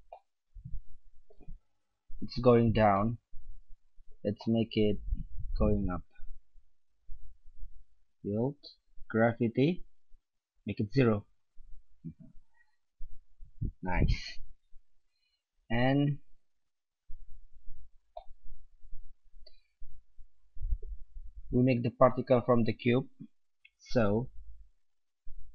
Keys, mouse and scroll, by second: 1.9 middle click, 7.0-8.8 drag, 10.1-11.8 drag, 16.2-17.3 middle drag, 23.7-25.5 middle drag.